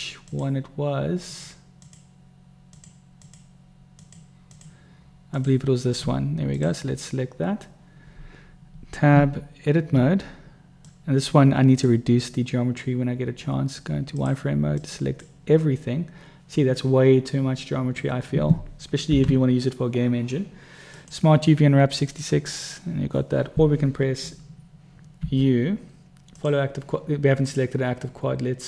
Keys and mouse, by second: 0.6 click, 1.6 click, 2.1 click, 3.1 click, 3.5 click, 4.2 click, 4.8 click, 5.7 click, 9.4 Tab, 11.2-12.2 drag, 13.4-14.5 middle drag, 14.5 click, 15.2 click, 19.4 u, 25.6 u.